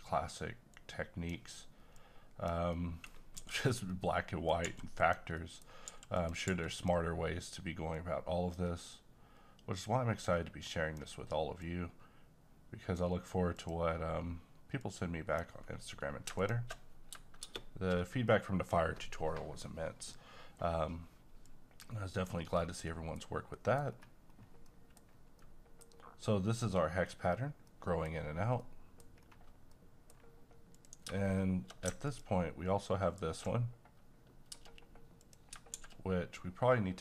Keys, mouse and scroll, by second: 2.7 middle click, 3.4 g, 3.6 click, 3.9 middle click, 4.7 g, 4.9 click, 5.0 click, 5.4 middle click, 5.9 g, 6.1 click, 6.5 g, 6.8-16.4 drag, 17.4 shift+space, 21.4 click, 22.5-22.8 scroll down 1, 22.8 middle click, 23.1-23.5 scroll down 1, 23.5 middle click, 23.8-24.6 scroll up 1, 24.6 middle click, 24.9-25.4 scroll up 1, 25.4-29.1 middle drag, 29.1-29.7 scroll down 1, 29.7 middle click, 30.7 click, 32.0 click, 35.2 click, 35.7 a.